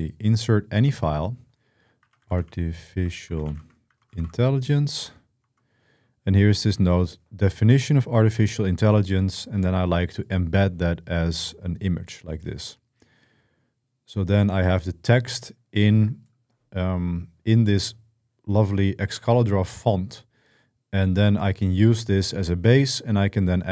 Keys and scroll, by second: 1.4-5.2 typing.